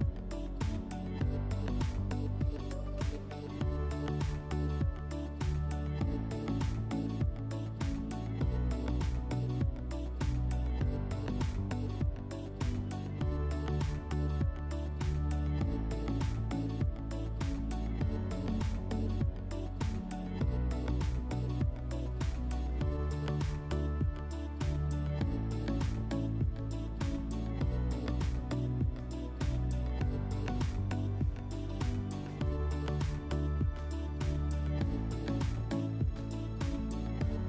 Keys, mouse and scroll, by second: 1.6-2.1 scroll, 2.2 click, 4.7 click, 6.7 click, 6.9-9.0 drag, 11.0 click, 14.8 drag, 15.4 click, 16.0 click, 16.8 click, 17.5 shift+click, 18.3 click, 18.7 click, 19.3 click, 19.7 click, 20.4 click, 20.7 click, 34.7 click, 36.0 click.